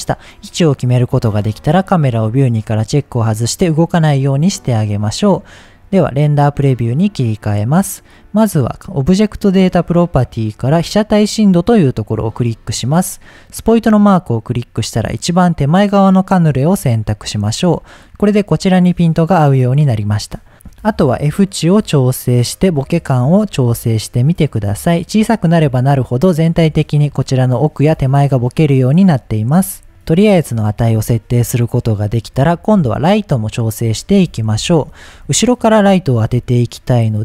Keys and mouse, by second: 1.6 click, 5.5-8.5 drag, 12.1 click, 13.6 click, 22.3-24.6 drag, 31.8-32.2 middle drag, 33.6 click, 34.6 KP_7, 36.2 g.